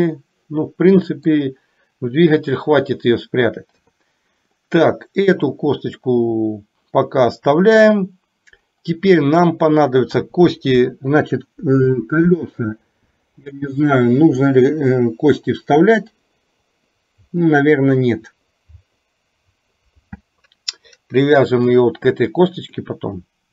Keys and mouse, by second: 3.7 KP_3, 22.6 click.